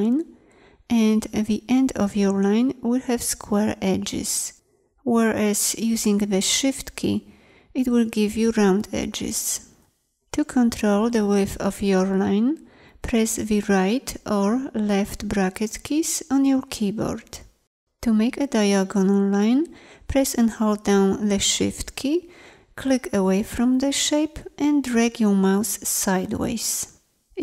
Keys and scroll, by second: 13.7 ], 15.0 [.